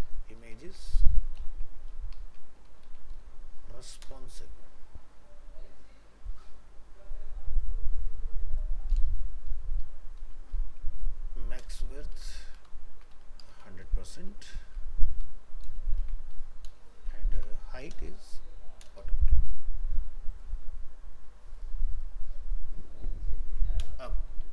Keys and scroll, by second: 0.6 ctrl+shift+Left, 12.7 ctrl+shift+Left, 16.0 ctrl+s, 19.2 ctrl+s.